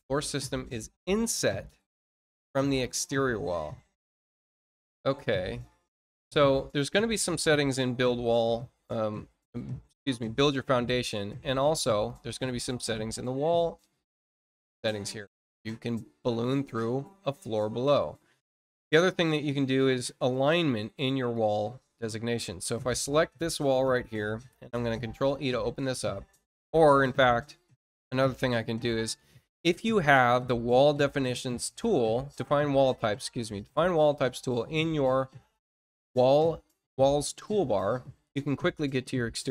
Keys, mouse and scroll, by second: 5.1-5.6 scroll down 2, 5.8 scroll down 2, 6.5-8.2 scroll down 8, 9.1-9.4 scroll down 2, 11.8 click, 14.6 click, 16.3-17.4 middle drag, 17.6 middle click, 18.1 middle click, 21.3 click, 22.6 click, 26.9 click, 37.1 click.